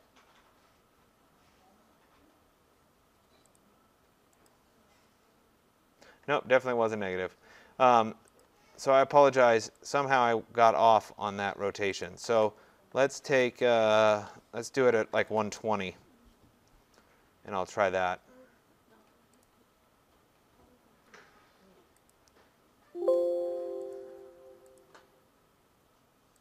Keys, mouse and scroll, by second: 3.6 click, 4.5 click, 8.4 click, 9.9 click, 12.0 click, 13.2 click, 14.1 click, 14.9-15.9 typing, 19.4 click, 22.1 click, 24.0 click, 24.8 click.